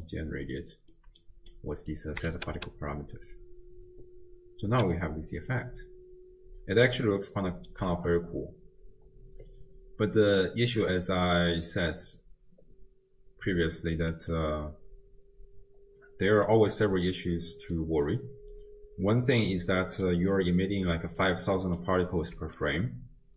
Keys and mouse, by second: 1.0 middle click, 1.6 click, 2.3 shift+space, 4.7 space, 5.0-7.7 drag, 8.0 shift+space, 14.1 space, 14.3-16.5 drag, 17.8-20.1 drag, 20.9 d, 21.2 click, 21.8 d, 22.0 d, 22.3 d, 22.6-23.3 drag.